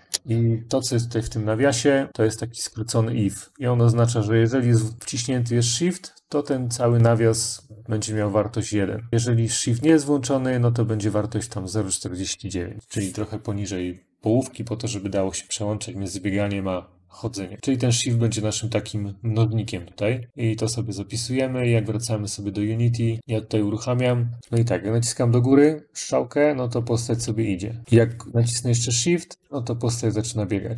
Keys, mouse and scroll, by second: 17.6 click, 17.8 click, 20.0 ctrl+s, 21.4 click, 23.2 click, 24.4 Left, 24.8-26.9 Up, 27.8 Left, 27.8 Left, 27.8 Up, 28.0 Up, 28.1 Up, 29.7-30.7 Left.